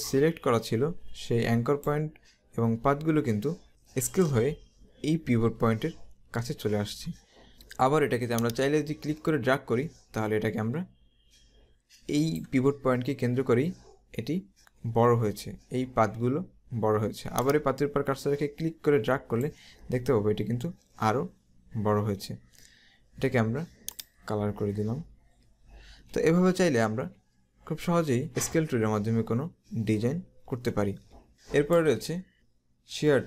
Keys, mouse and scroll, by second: 8.5 click, 17.5 click, 20.2 scroll down 1, 24.1 click, 24.8-25.2 scroll down 1, 26.9-27.7 typing, 28.5 scroll up 1, 31.3 click, 31.4 space, 32.3 right click.